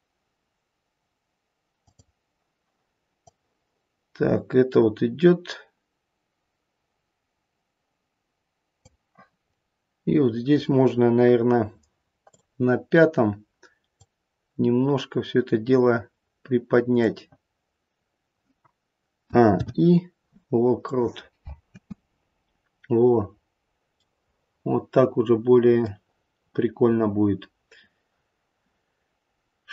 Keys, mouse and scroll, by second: 1.8 click, 3.2 click, 9.4-9.8 scroll down 1, 12.3 click, 12.3-12.6 scroll down 2, 13.9 click, 19.2 a, 19.4 i, 21.6 space, 23.0-24.0 scroll up 1, 24.0 middle click.